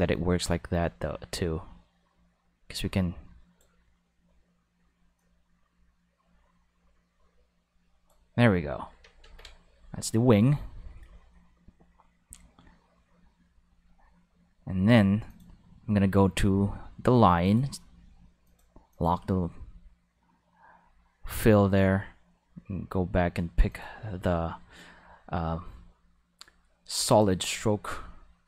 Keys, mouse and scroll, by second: 5.1-9.2 drag, 9.2 ctrl+s, 15.2 click, 17.4 click, 18.4-20.9 drag, 23.7 click, 27.1 click.